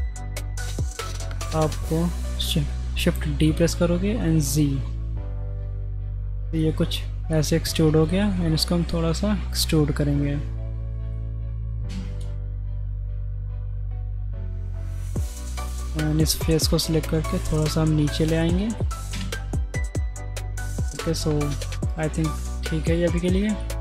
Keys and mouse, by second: 1.0 shift+middle click, 3.1 shift+d, 7.3-8.1 middle drag, 8.7 e, 11.4 middle click, 11.9 Tab, 12.8 Tab, 13.2 middle click, 15.0 middle click, 17.1 g, 18.4 middle click, 19.1 Tab, 20.3 middle click, 20.5 click, 20.9-22.8 middle drag, 23.7 shift+middle click.